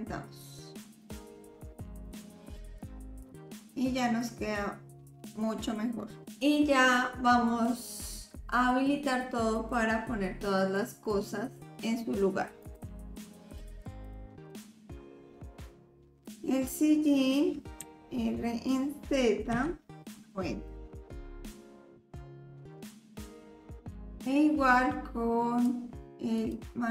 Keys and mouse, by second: 1.9 click, 2.5 click, 3.8-6.3 middle drag, 12.6 click, 13.5 click, 14.0 click, 14.5 click, 15.1-16.3 drag, 17.8 r, 20.8 click, 21.1 s, 21.8 KP_7, 22.0 click, 22.2 s, 22.7 click, 22.8 middle click, 23.1 click, 23.8 drag, 23.8 middle drag, 25.7 click, 26.0 ctrl+z, 26.3 click.